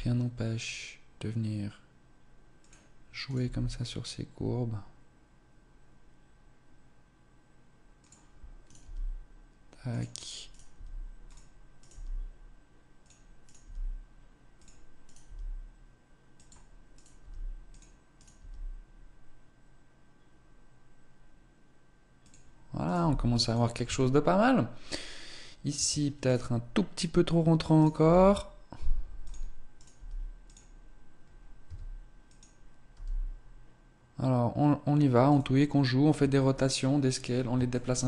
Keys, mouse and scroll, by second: 3.1 right click, 3.3 g, 8.2 right click, 8.2 g, 10.3 right click, 10.6 g, 11.7 right click, 11.8 g, 13.3 right click, 13.5 g, 14.4 click, 16.8 right click, 17.1 g, 18.0 right click, 18.3 g, 22.1 click, 22.7 right click, 22.8 g, 23.7 Tab, 24.1-24.7 scroll down 1, 24.7-25.6 scroll down 2, 25.6 Tab, 26.1 right click, 27.6 right click, 27.8 g, 29.1 click, 29.6 right click, 29.8 g, 31.5 s, 32.7 g, 35.6 scroll down 1, 35.7 Tab, 37.6 shift+middle click.